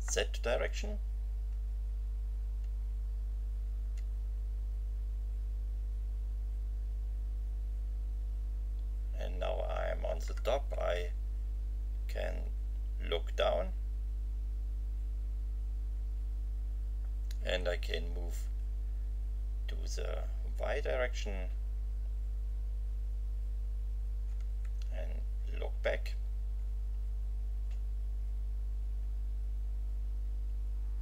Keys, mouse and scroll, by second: 0.5 Page_Up, 11.0 Up, 18.0 End, 24.6 Left, 29.8 Delete.